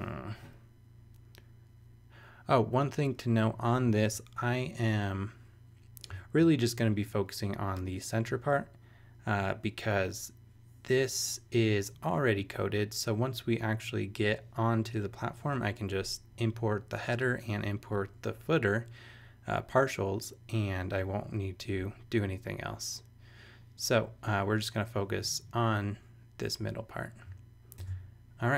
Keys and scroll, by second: 4.0 super+Tab, 27.8 super+Tab.